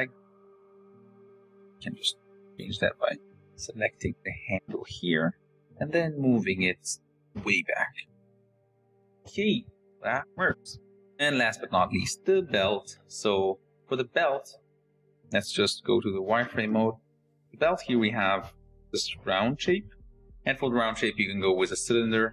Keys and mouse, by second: 2.1 click, 2.7 click, 3.2 Tab, 3.8 click, 5.2 click, 5.6 click, 6.3 click, 6.9 g, 8.3 Tab, 9.0 KP_0, 11.8 shift+drag, 15.8 z, 16.4-16.8 shift+drag.